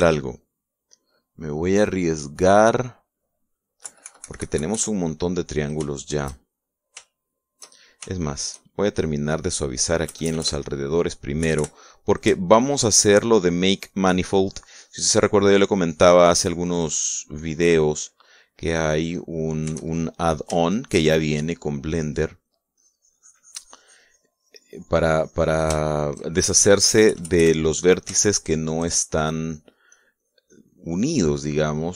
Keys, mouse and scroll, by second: 0.8-2.6 drag, 4.6 KP_Subtract, 5.9 click, 6.2 middle click, 7.5 shift+middle click, 7.9 shift+middle click, 8.9 shift+middle click, 10.1 middle click, 10.8 KP_Add, 12.2 KP_Subtract, 13.2-20.3 shift+drag, 20.7-21.8 shift+drag, 22.0 shift+click, 23.6-26.6 drag, 27.7 KP_Add, 29.1 shift+click, 29.8 shift+click, 31.8 click.